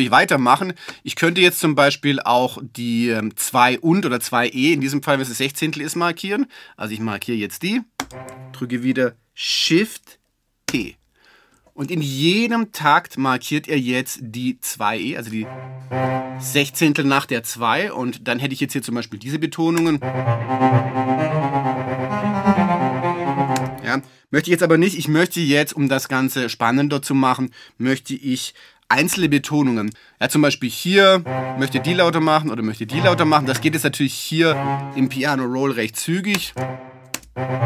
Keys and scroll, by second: 10.7 shift+p, 19.8 space, 23.6 space, 29.1 super+z.